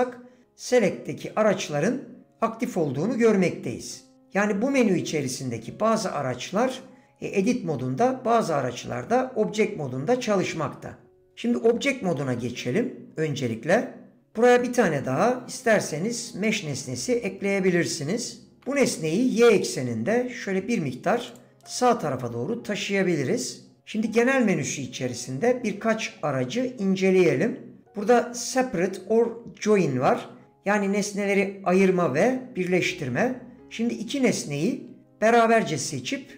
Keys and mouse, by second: 13.7 Tab, 17.4 shift+a, 19.6 g, 21.7 middle click.